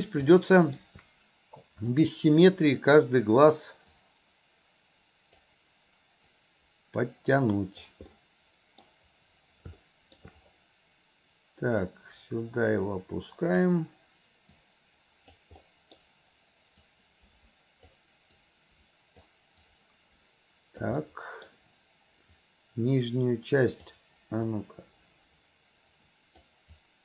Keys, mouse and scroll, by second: 0.4 middle click, 1.9 click, 4.0-5.5 drag, 6.4-7.9 drag, 8.2 middle click, 11.9-13.7 drag, 14.7 click, 15.7-16.9 middle drag, 16.9-17.9 drag, 18.4 click, 19.7-20.9 drag, 21.1 middle click, 22.4-23.9 drag, 24.6-26.5 drag, 26.8-27.0 drag.